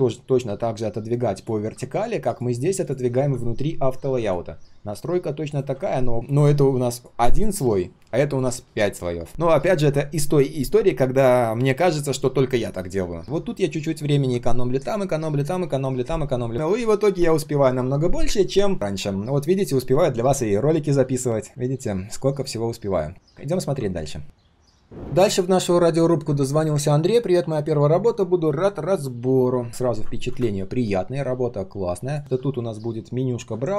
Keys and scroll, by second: 29.9 ctrl+\.